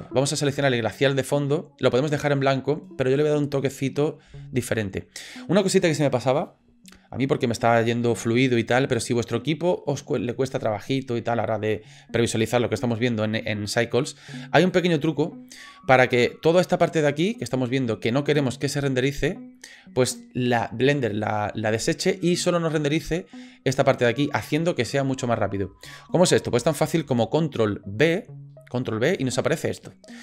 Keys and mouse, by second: 0.5 click, 14.7 click, 28.0 ctrl+b.